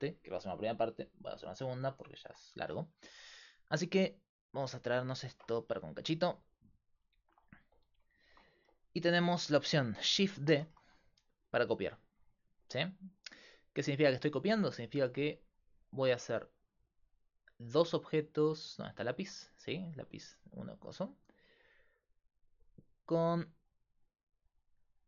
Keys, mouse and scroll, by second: 0.0-25.0 typing, 3.8 right click, 4.8 right click, 12.3 click, 16.7-25.0 right drag.